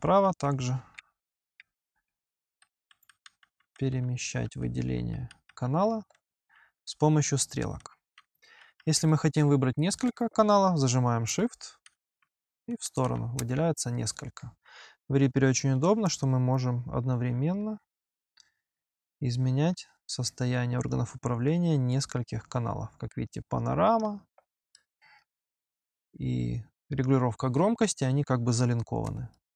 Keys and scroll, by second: 0.1 Right, 0.8 Insert, 1.9 Left, 2.7 Right, 4.1 Left, 5.9 Right, 6.7 Left, 7.6 Right, 8.4 Left, 11.1 Left, 11.7 shift+Right, 12.2 shift+Right.